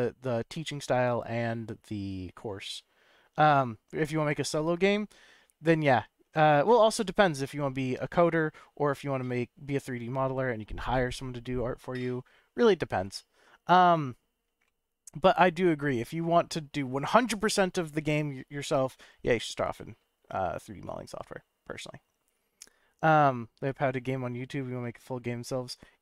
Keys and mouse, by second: 14.7-16.7 middle drag, 19.3-20.0 middle drag, 21.0 middle click.